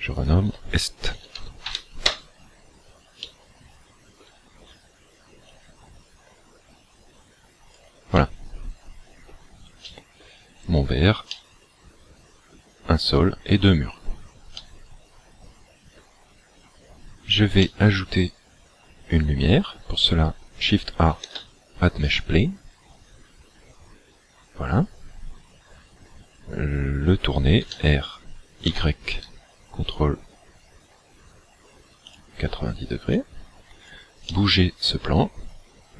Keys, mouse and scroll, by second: 0.2 ctrl+click, 3.2 middle click, 5.5 click, 8.1 middle click, 9.9 shift+middle click, 10.5-11.0 scroll up 3, 11.4 middle click, 14.0-14.6 scroll down 2, 14.6 middle click, 14.6-15.1 scroll down 2, 17.7 middle click, 21.2 shift+a, 27.6 r, 32.1 ctrl+click, 33.2 click, 34.2 middle click.